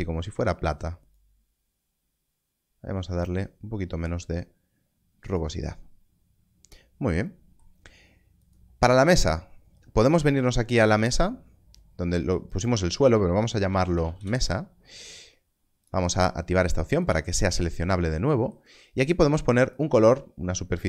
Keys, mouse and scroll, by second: 1.1 click, 8.4 click, 13.5 shift+m, 13.9 s, 14.1 Return, 15.8 click, 19.7 click.